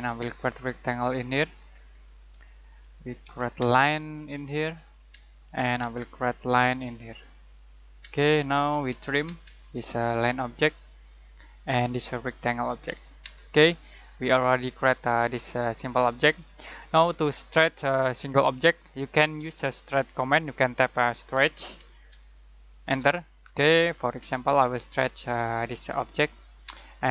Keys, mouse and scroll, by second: 0.1 space, 1.3 click, 3.5 space, 4.1 click, 5.1 space, 6.3 click, 8.0-9.3 typing, 9.6 click, 13.2 space, 13.5 middle click, 20.6-22.8 typing, 24.9 click, 26.6 space.